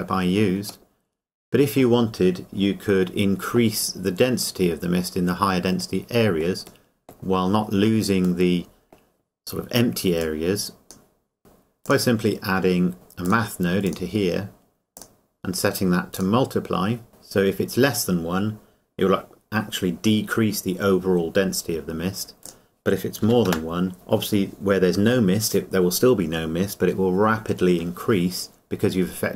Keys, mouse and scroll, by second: 0.9 middle click, 2.9-3.8 scroll up 1, 6.6-7.9 scroll up 1, 8.5 middle click, 10.2 click, 22.5 click.